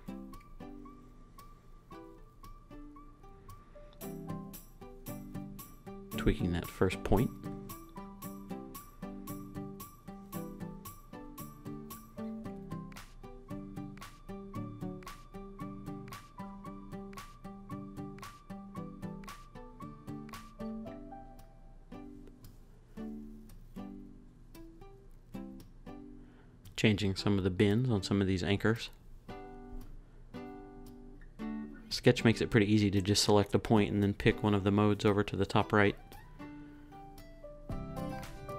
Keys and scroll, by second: 33.0 super+z, 37.6 super+s.